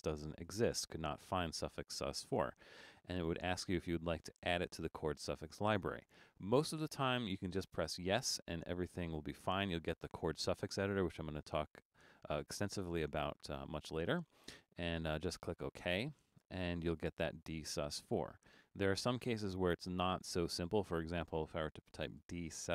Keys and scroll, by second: 20.4 space, 21.4-22.5 typing.